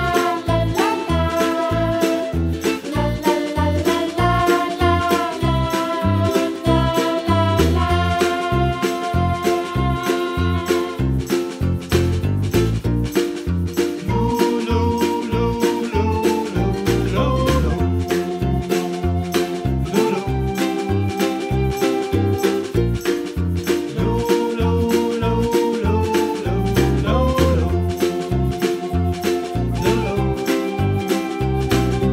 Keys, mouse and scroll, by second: 0.0-0.9 middle drag, 0.9 g, 3.0 middle drag, 3.3 shift+click, 3.5 shift+click, 3.8 shift+click, 4.4 shift+drag, 4.8 shift+click, 5.0 shift+click, 5.6 ctrl+j, 5.9 scroll down 2, 6.1-6.8 middle drag, 6.8 shift+click, 7.5 ctrl+j, 7.9-8.3 scroll down 6, 8.7 click, 9.2 Delete, 9.6 click, 10.0 g, 11.5 KP_Decimal, 11.7 g, 12.4 g, 13.9 g, 14.6 r, 16.6 g, 17.3-18.6 middle drag, 18.6 g, 19.6-20.4 middle drag, 20.4 s, 21.3-22.0 middle drag, 22.0 KP_Decimal, 22.3-22.6 scroll down 4, 22.6-23.3 middle drag, 23.5 scroll down 2, 23.7 middle click, 24.0-24.5 scroll up 3, 24.5 s, 25.3 r, 26.4-26.7 scroll up 1, 26.7-27.7 middle drag, 27.7 g, 29.2-30.3 middle drag, 30.3-30.8 scroll down 3, 30.8-31.7 middle drag, 31.7 Tab, 31.9 middle click.